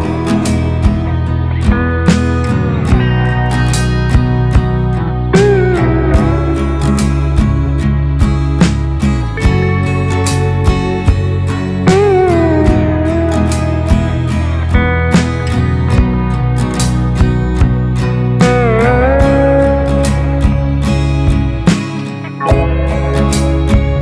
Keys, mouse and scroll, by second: 0.3 alt+i, 1.1 alt+d, 2.6 click, 4.6 click, 6.1 click, 8.9 click, 11.3 click, 12.9 ctrl+space, 13.0 ctrl+click, 13.4 ctrl+space, 14.3 ctrl+space, 14.4 click, 14.8 ctrl+space, 15.1 ctrl+click, 15.6 ctrl+space, 16.2 Tab, 18.0 ctrl+space, 18.1 ctrl+click, 18.6 ctrl+space, 19.9 click, 19.9 space, 21.7 ctrl+click, 21.9 ctrl+click, 22.3 ctrl+click.